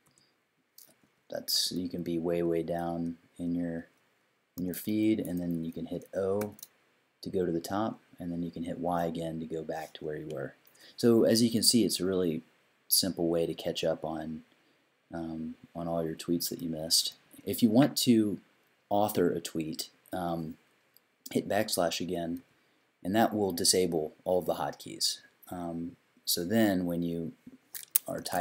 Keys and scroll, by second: 0.0-2.3 typing, 4.6 i, 6.4 o, 8.9 y, 12.1 i, 16.6 i, 17.1 i, 22.4 \, 27.9-28.4 typing.